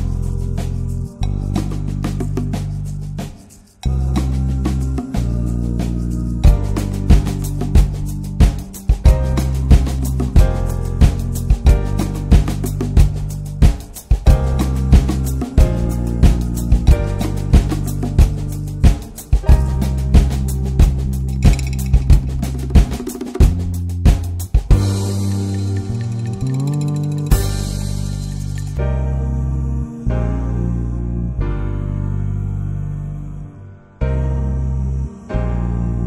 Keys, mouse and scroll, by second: 0.6-7.1 drag, 7.1-10.1 middle drag, 10.1 click, 10.6 click, 11.6 click, 12.2 scroll up 2, 12.7-16.4 middle drag, 16.4 click, 17.4-23.2 middle drag, 23.2 scroll up 1, 23.5-25.3 shift+middle drag, 25.3 scroll down 1, 25.6 shift+middle click, 26.2-27.2 scroll up 3, 26.7 shift+middle click, 27.2-30.5 middle drag, 30.5 click, 31.9-35.4 drag, 35.4-36.0 middle drag.